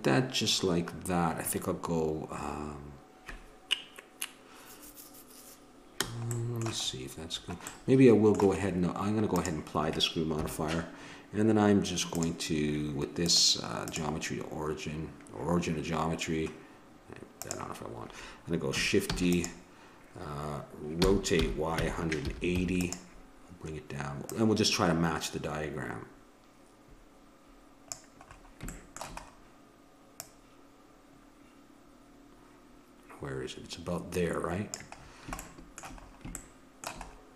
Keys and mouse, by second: 9.3-10.3 drag, 10.3 KP_1, 13.4 click, 19.1 shift+d, 21.0 r, 24.2 click, 29.0-30.2 middle drag, 30.2-32.1 drag, 35.0-36.1 middle drag.